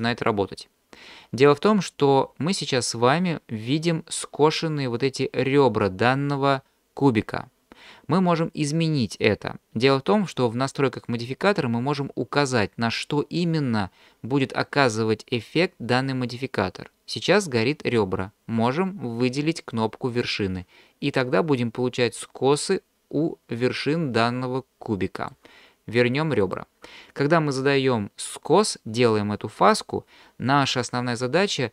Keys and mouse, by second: 20.1 click, 22.3-25.3 middle drag, 26.4 click.